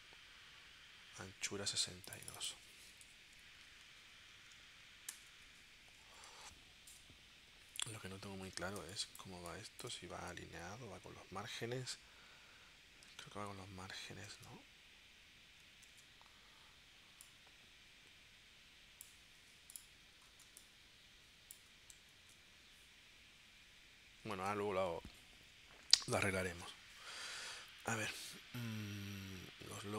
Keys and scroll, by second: 3.1 6, 3.6 2, 5.1 Return, 8.8 space, 13.1 super+Tab, 14.4 super+Tab, 15.9 super+Tab, 20.5 space, 22.2 super+Tab, 24.4 super+Tab.